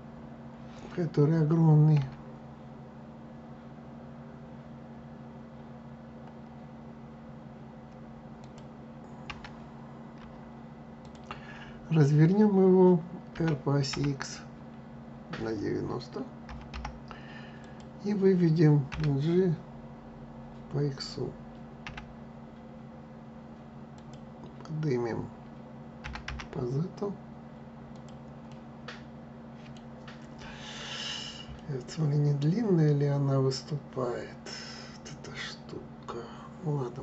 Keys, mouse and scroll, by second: 1.7 s, 9.0 s, 13.0 r, 18.6 g, 25.7 g, 28.2-34.3 middle drag.